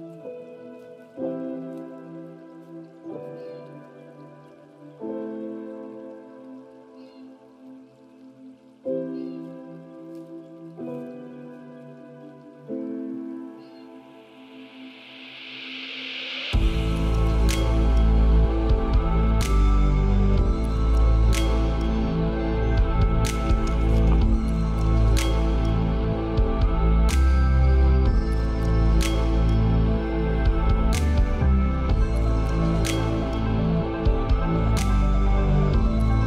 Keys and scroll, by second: 6.0 ctrl+space.